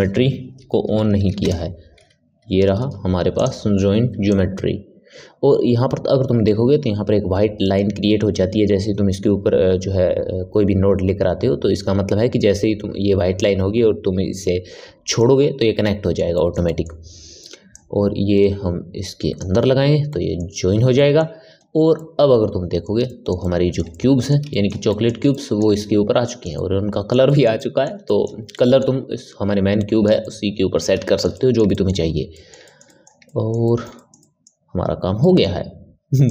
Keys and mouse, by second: 4.2 click, 15.8-17.7 middle drag, 17.7 click, 20.0-36.2 middle drag, 36.2 click.